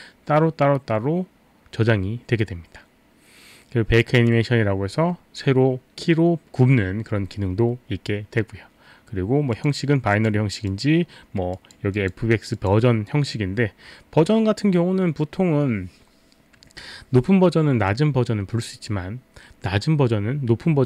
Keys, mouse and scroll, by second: 9.5 click, 10.2 click, 10.7 click, 11.6 click, 11.9 click.